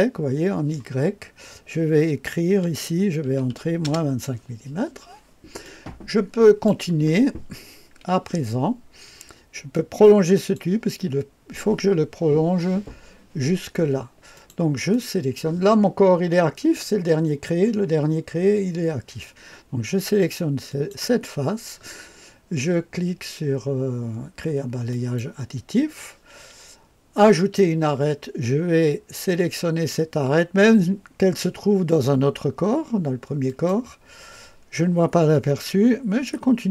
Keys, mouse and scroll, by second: 2.4 KP_Subtract, 3.2 KP_2, 3.4 KP_5, 3.7 Return, 5.6-9.1 drag, 9.6 click, 14.3 click, 14.9 click, 20.6 click, 24.8 click, 27.2 click, 33.4 click.